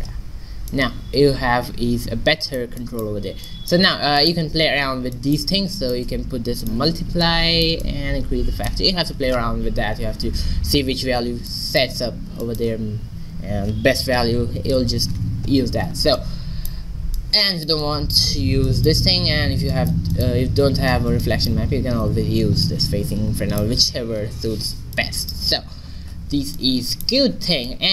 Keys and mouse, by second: 0.4 middle click, 1.2 middle click, 1.4-2.7 middle drag, 3.0 middle click, 5.8-9.7 drag, 9.7-15.1 middle drag, 16.2 middle click, 17.3-19.1 drag, 20.2-21.4 drag, 21.0 x, 22.0 middle click, 22.7 click, 25.0-26.3 middle drag, 26.3 shift+z.